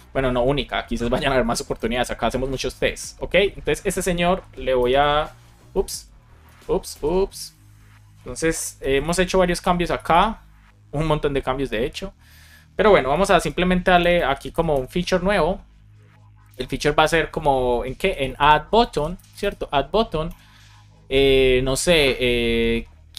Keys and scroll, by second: 5.7 super+z, 6.4 super+z, 6.8 super+z, 8.9 Return, 9.7 BackSpace, 13.3 space, 14.6 Return, 16.4 Return, 18.7 space, 20.2 Return.